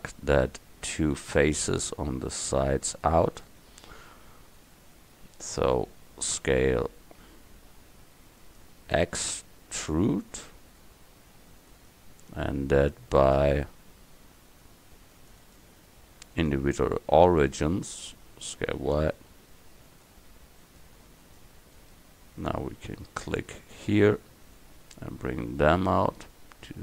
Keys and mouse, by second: 0.4-1.6 middle drag, 3.6-5.5 middle drag, 6.4 s, 9.0 e, 18.5 s.